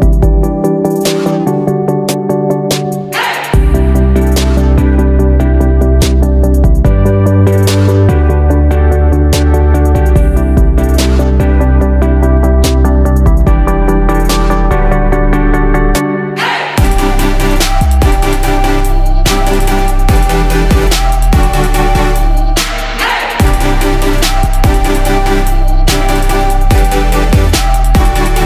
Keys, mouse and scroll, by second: 4.3 right click, 6.4-15.7 drag, 16.7 shift+click, 18.2 click, 19.3 shift+click, 19.9 shift+click, 21.1-22.7 drag, 23.6 ctrl+g, 24.7-26.7 drag, 27.9 ctrl+d, 28.3-28.4 drag.